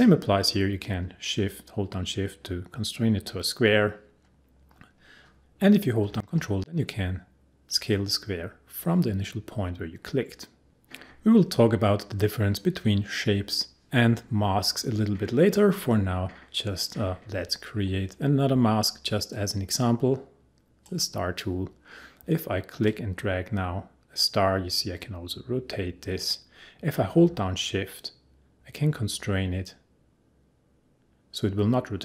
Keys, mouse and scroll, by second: 19.3-22.8 drag, 22.8 click, 22.9-32.0 drag.